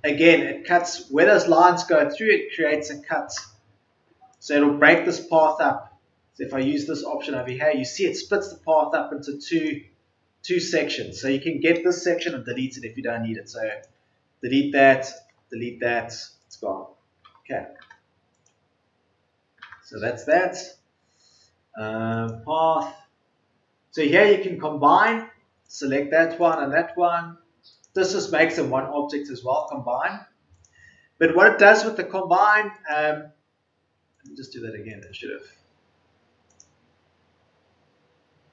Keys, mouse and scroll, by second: 12.1 Delete.